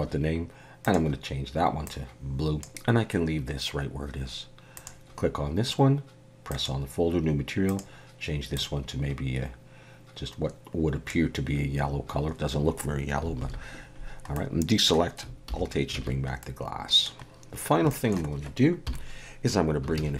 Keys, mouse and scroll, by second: 0.8 click, 4.8 click, 6.5 click, 7.7 click, 13.4 alt+a, 14.3 middle click, 15.5 alt+h, 16.0 alt+a, 16.4 middle click, 17.3 scroll down 1, 17.9 shift+middle click, 18.8 KP_7, 19.9 shift+a.